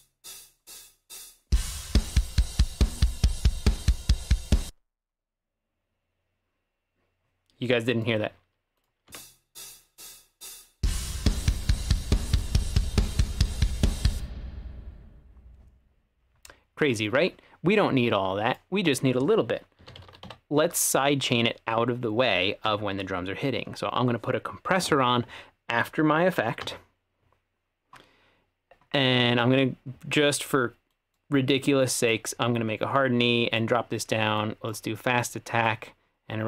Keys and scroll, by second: 4.7 space, 9.1 space, 14.2 space, 19.6-20.8 typing, 22.8 Down, 26.7 Return.